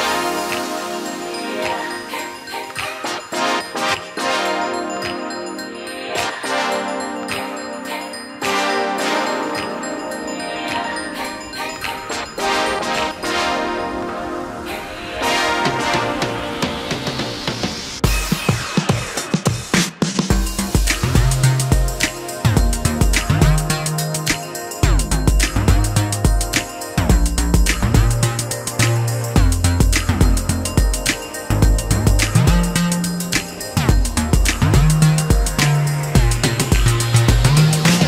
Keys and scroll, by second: 0.7 shift+x, 8.8 shift+x, 15.7 space, 15.8 Escape, 22.1 Escape, 24.7 ctrl+g, 27.4 w, 28.8 shift+s, 30.3 e.